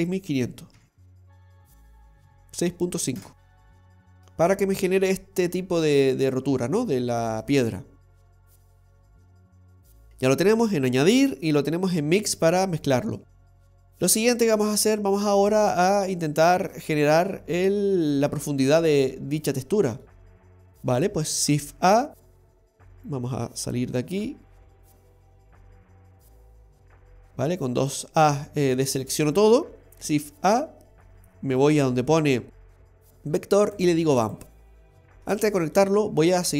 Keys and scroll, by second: 11.4 typing.